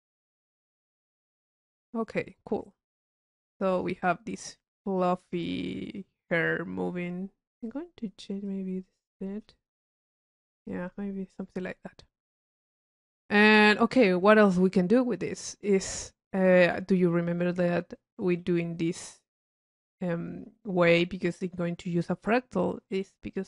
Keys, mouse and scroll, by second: 0.1 middle click, 0.9 click, 3.6 click, 4.8 click, 7.0 click, 7.8 click, 8.6-9.2 drag, 9.6 click, 9.8 click, 10.9 click, 12.6 click, 13.8 click, 15.2-16.1 drag, 16.6-18.3 middle drag, 18.6 right click, 19.4-21.4 drag, 19.4-21.2 right drag, 22.2 click, 23.1 right click, 23.2 click.